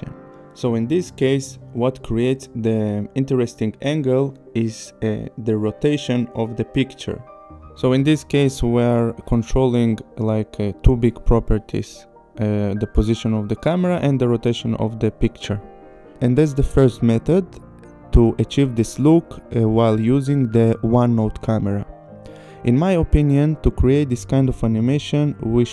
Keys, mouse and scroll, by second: 0.8 click, 2.7 click, 6.5 click, 9.3 click, 13.3 click, 14.1 click, 14.9 click, 15.6 click, 22.1 click, 23.2 click, 24.5 click, 25.6 click.